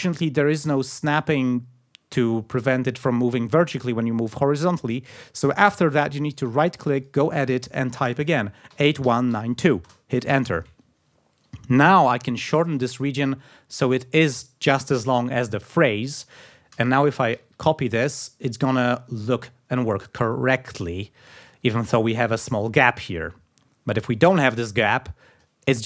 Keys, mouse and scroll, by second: 6.2 right click, 7.0 click, 8.4-10.1 typing, 11.9 click, 13.1 ctrl+scroll down 2, 16.7 alt+d, 17.3 alt+d, 18.7 click, 19.3-19.6 ctrl+scroll up 2, 20.5 ctrl+scroll down 2, 21.5-21.8 ctrl+scroll up 2, 22.0 ctrl+scroll up 2, 22.9-23.4 ctrl+scroll down 4.